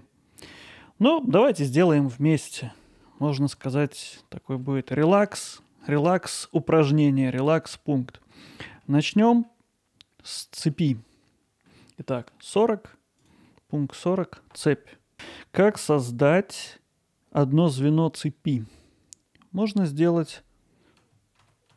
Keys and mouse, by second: 1.8 middle click, 3.2 alt+middle click, 3.7-4.1 ctrl+alt+middle drag, 4.4 alt+middle click, 4.9-5.3 middle drag, 5.6 middle click, 6.4-6.9 ctrl+alt+middle drag, 8.6 middle click, 9.3 middle click, 10.2 middle click, 10.7 middle click, 12.1 middle click, 13.2 drag, 13.5 middle click, 15.1-15.6 middle drag, 21.4 shift+a.